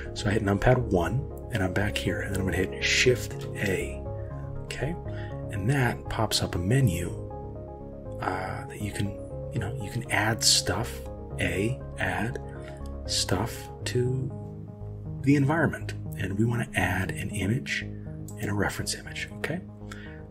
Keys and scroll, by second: 3.5 shift+a.